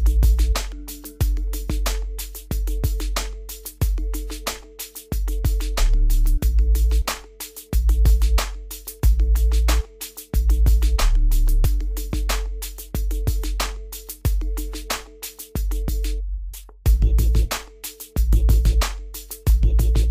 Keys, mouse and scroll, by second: 1.2 scroll down 1, 6.5 scroll up 1, 8.6-13.5 drag, 13.5 scroll up 1, 13.9 scroll down 1, 14.9-20.1 drag.